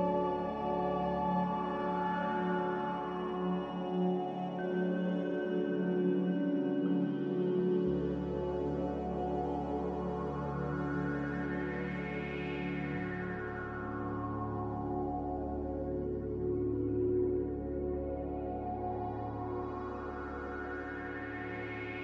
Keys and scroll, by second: 17.2 z.